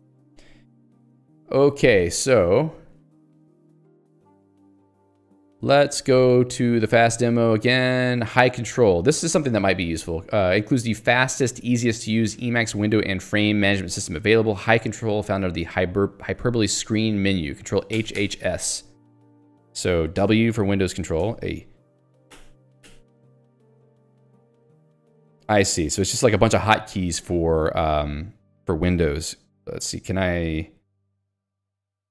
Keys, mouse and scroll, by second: 3.0 click, 3.7 click, 3.7 middle click, 4.8 click, 4.9 middle click, 6.8 ctrl+j, 7.1 Return, 10.9 click, 16.5 Escape, 18.4 s, 20.2 w, 21.2 ctrl+g, 23.4 s, 24.0 w.